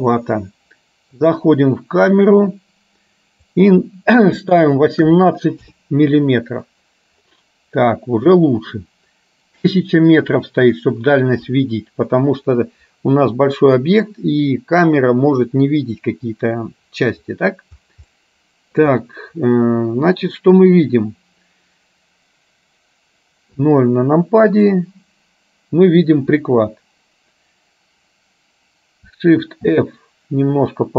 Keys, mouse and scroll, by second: 1.3 click, 3.7-5.8 drag, 18.2 middle click, 23.6 KP_0, 29.7 shift+f.